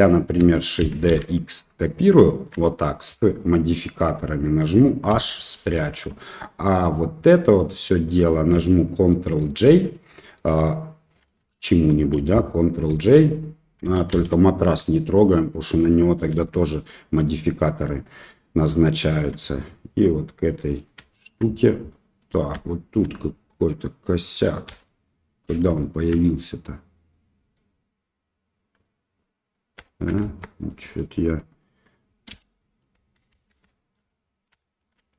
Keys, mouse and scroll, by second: 0.8 shift+d, 2.2 shift+middle click, 3.3 middle click, 5.1 h, 5.8 shift+middle click, 6.6 drag, 7.5-8.1 middle drag, 9.3 ctrl+j, 11.4 shift+click, 12.9 ctrl+j, 14.1 ctrl+z, 16.4 shift+click, 17.3 shift+click, 18.6 shift+click, 20.0-20.8 middle drag, 21.1 shift+middle drag, 21.8-22.4 middle drag, 22.6 shift+middle drag, 23.6-24.2 middle drag, 24.6 KP_1, 25.8 shift+middle drag, 29.8 shift+click, 30.2 Tab, 30.7 click, 32.3 l, 33.3 shift+z, 33.6 shift+middle click, 34.6 shift+middle click.